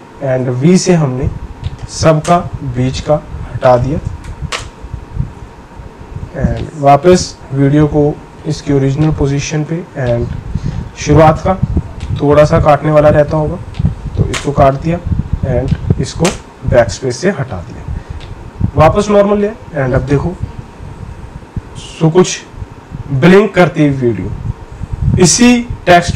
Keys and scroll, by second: 0.4 v, 2.2 BackSpace, 4.5 BackSpace, 14.3 BackSpace, 16.2 BackSpace.